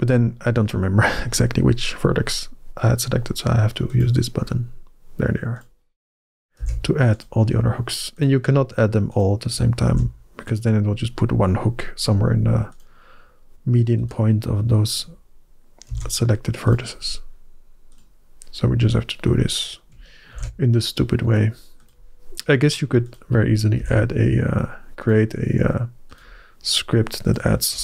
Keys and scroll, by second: 6.4 ctrl+h, 9.7 ctrl+h, 15.7 ctrl+h, 20.2 ctrl+h, 23.6 ctrl+h.